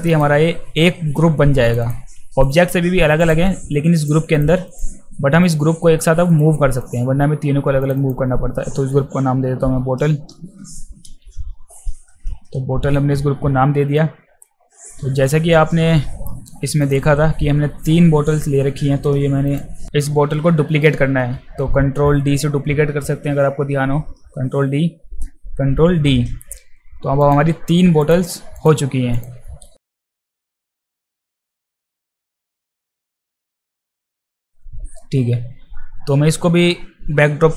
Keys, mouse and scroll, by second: 0.1 click, 1.8 click, 2.4 click, 3.2 click, 4.0 click, 4.7 click, 5.4 click, 6.3 click, 6.7 click, 7.8 click, 8.0 click, 11.1 t, 12.0 e, 13.9 click, 16.8 click, 19.5 click, 24.1 ctrl+d, 25.7 ctrl+d, 27.2 click, 28.0 click, 28.6 click, 29.2 click, 29.8 click, 30.0 click, 30.1 click, 30.6 click, 30.6 space, 30.9 click, 31.0 alt+right click, 31.3 alt+right click, 31.4 alt+middle click, 31.4 alt+right click, 31.5 click, 31.6 click, 31.9 click, 32.2 ctrl+z, 32.3 click, 32.5 click, 32.8 click, 32.8 space, 33.8 click, 34.0 click, 34.1 click, 34.2 click, 34.5 click.